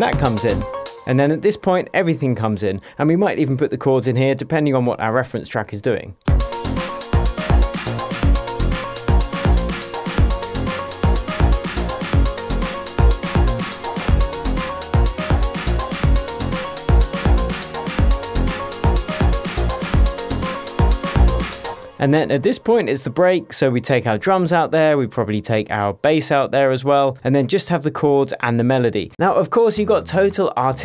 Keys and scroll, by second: 1.3 space, 6.6 space, 22.1 space, 24.5 BackSpace, 27.6 BackSpace.